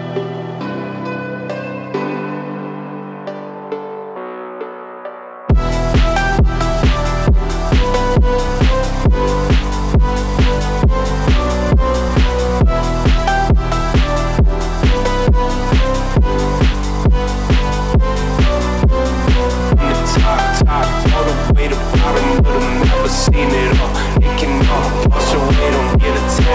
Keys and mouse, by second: 1.2 click, 1.3 g, 2.2 click, 2.4 g, 3.7 click, 3.9 g, 5.6 click, 5.9 g, 6.8 g, 8.3 click, 8.5 g, 9.6 middle click, 10.8-11.9 middle drag, 13.3 click, 13.6 g, 15.2 click, 15.3 g, 16.9 click, 17.4 click, 18.3-20.2 middle drag, 18.3 g, 20.7 click, 21.1 shift+click, 21.9 m, 23.6 middle click, 24.5 click, 25.6 g.